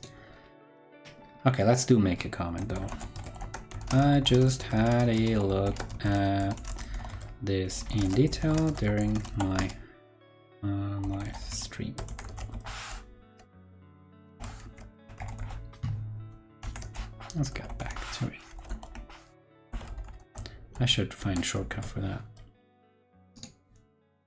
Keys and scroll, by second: 14.6 super+Right, 16.5 super+t, 20.7 super+l, 21.1 super+c, 21.5 super+w.